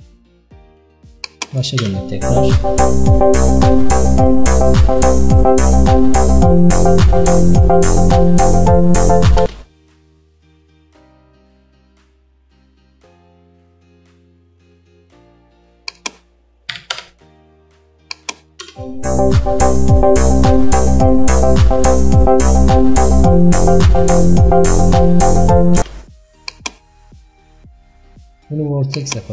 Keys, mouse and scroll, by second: 0.0 shift+middle click, 0.5-0.8 shift+scroll up 1, 1.3 click, 1.9 space, 6.0-6.5 scroll up 2, 9.5 space, 17.0-18.7 drag, 18.7 space, 25.9 space, 29.1-29.3 drag.